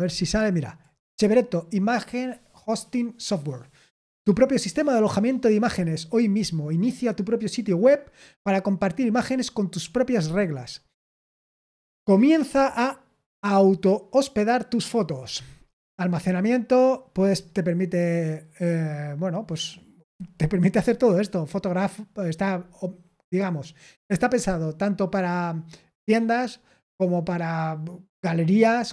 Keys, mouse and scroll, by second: 0.6 click, 9.8-13.3 scroll down 3, 15.1-18.3 scroll down 2, 22.5-23.4 scroll up 2.